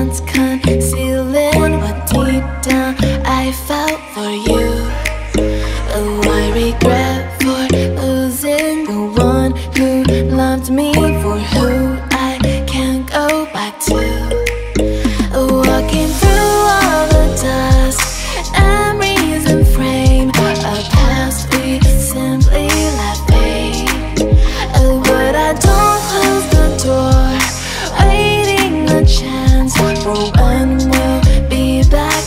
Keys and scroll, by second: 0.0-0.1 typing, 1.3 BackSpace, 1.3 2, 1.4 Return, 2.0 F4, 2.5 F4, 5.2 F4, 5.6 F4, 6.2 2, 12.6 0, 12.6 Return, 13.6 4, 16.3 1, 23.1-24.1 typing, 25.2 2, 26.5 4, 28.7-30.2 typing, 28.8 Return.